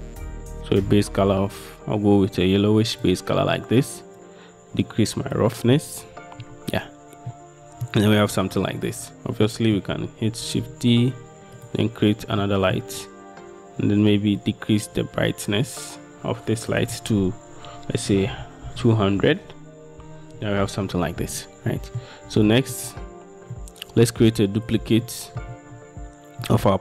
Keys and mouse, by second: 4.4-5.9 middle drag, 7.4-8.0 middle drag, 9.6 middle click, 10.6 shift+d, 12.5 middle click, 14.6-22.1 drag, 22.6 shift+middle click, 23.7-24.2 middle drag, 25.2-25.6 shift+middle drag, 26.6 middle drag.